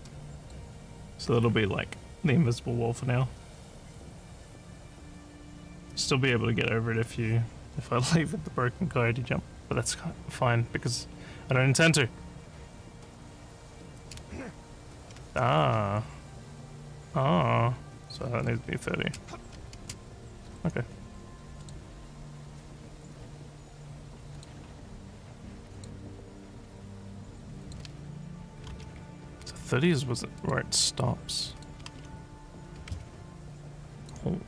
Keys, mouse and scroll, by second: 0.4 click, 13.7-16.2 typing, 17.7-19.1 typing, 21.5 click, 24.4 click, 25.7 click, 27.6 click, 29.8 click, 30.4 click, 31.5 click, 34.0 click.